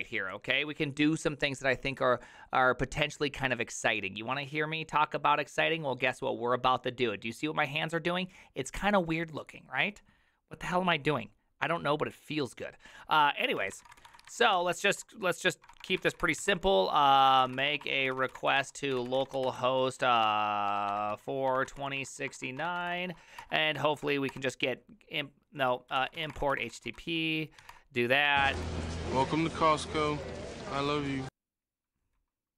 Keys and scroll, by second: 13.5-24.0 typing, 23.4 Return, 24.3 Return, 25.7-27.4 typing, 27.6 Tab, 27.7 Return, 28.6 Tab, 28.6 Return, 30.1 Return.